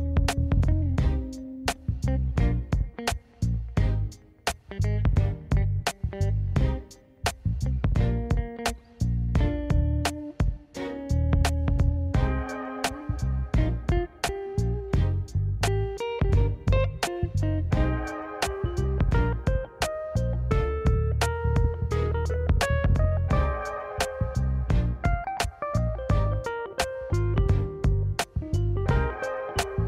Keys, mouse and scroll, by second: 1.3 Tab, 1.5 middle click, 1.8 click, 1.9 right click, 2.5 middle click, 2.9 alt+z, 3.0 middle click, 3.5 scroll up 1, 3.7 scroll down 2, 4.2 KP_1, 4.9 scroll down 1, 5.7-6.3 drag, 6.5-7.3 drag, 7.7 click, 8.5 click, 8.7-9.5 drag, 10.5 g, 11.9 click, 12.4-13.9 drag, 14.2 g, 15.0 g, 16.8 middle click, 17.2 g, 18.8 middle drag, 19.1 middle click, 19.5 KP_1, 20.3 click, 20.5-21.1 scroll up 3, 20.7 shift+middle click, 21.2 shift+middle drag, 21.6 click, 22.2-23.8 drag, 24.1 scroll down 2, 24.4 click, 24.7-25.7 right drag, 25.7 click, 25.9 scroll down 1, 26.7 click, 26.9 ctrl+a, 27.5 middle click, 27.7-28.1 scroll down 2, 27.9 middle drag, 28.8 KP_3, 29.2-29.7 scroll up 3, 29.7 click.